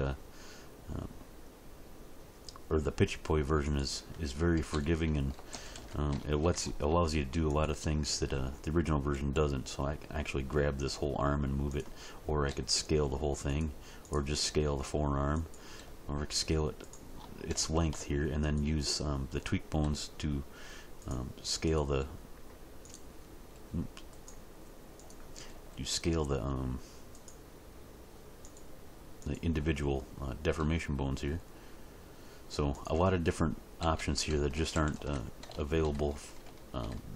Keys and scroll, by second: 4.5 a, 5.3 alt+r, 5.5 alt+g, 5.7 alt+s, 9.4 g, 12.4 s, 14.3 s, 15.7 s, 19.8 s, 22.0 s, 23.5 s, 25.5 s, 30.5 s, 33.8 a, 34.5 alt+r, 34.7 alt+g, 34.9 alt+s.